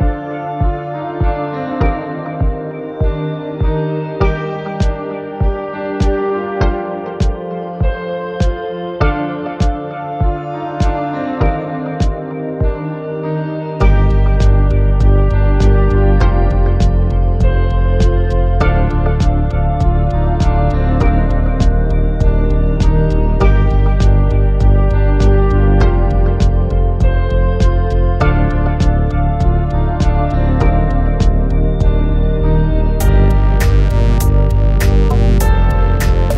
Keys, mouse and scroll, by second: 0.4-2.2 right drag, 4.0 KP_3, 5.8 r, 8.4 ctrl+click, 8.9-9.4 middle drag, 10.0 shift+middle click, 12.1-12.8 middle drag, 16.0 click, 16.9 click, 17.6-18.5 middle drag, 19.1-19.4 shift+middle drag, 19.9 middle drag, 22.4-23.4 drag, 24.1 click, 26.4 alt+s, 29.2 click, 31.8 alt+s, 33.9 click, 34.7 click.